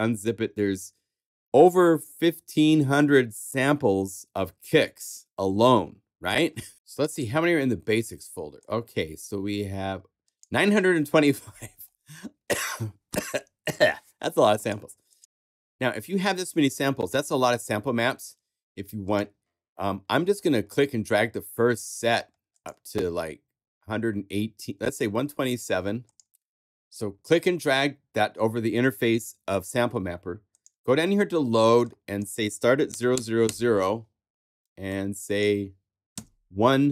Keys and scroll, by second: 0.2 super+a, 6.2 Left.